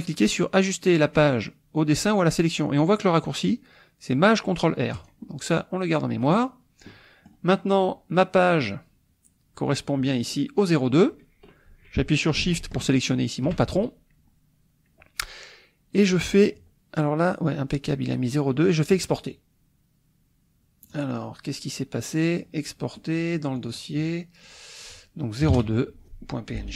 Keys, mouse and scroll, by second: 4.9 click, 6.2 click, 6.9 click, 12.9 shift+click, 18.9 click, 20.9 click, 22.2 click, 23.6 click, 24.4 click, 25.4-26.7 typing.